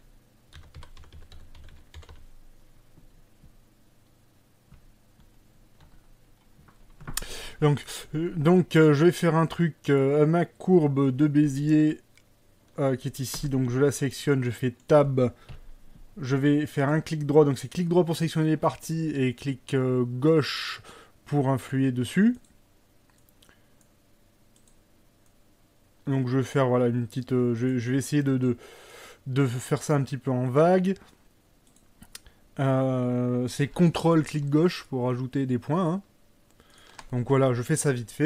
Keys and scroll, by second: 13.4 Tab, 15.6 KP_1.